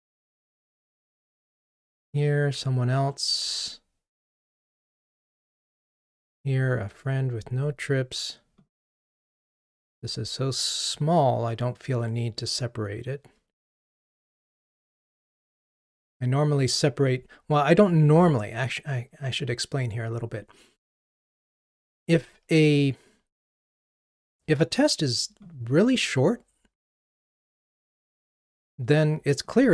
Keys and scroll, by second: 14.5 ctrl+r.